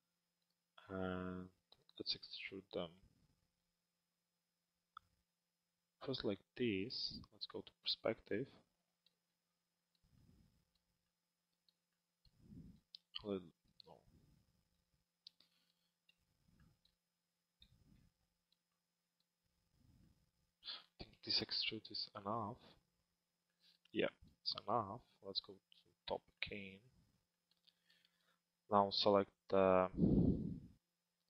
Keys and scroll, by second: 7.2 p, 25.0 t.